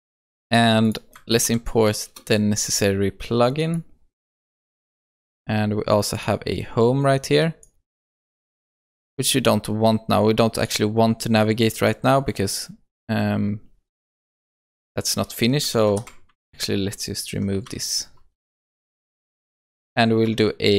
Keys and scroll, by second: 1.3 alt+Return, 16.3 ctrl+shift+Right, 18.3 ctrl+shift+Left.